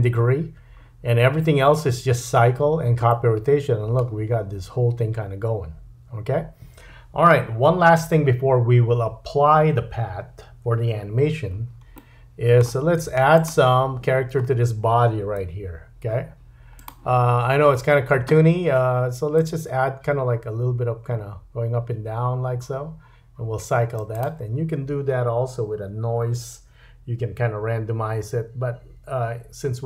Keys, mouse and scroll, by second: 3.1 middle click, 12.0 middle click, 13.0 space, 13.4 click, 13.9-16.8 middle drag, 13.9-15.4 scroll up 2, 15.4 KP_3, 16.8-24.2 drag, 24.2-29.8 middle drag.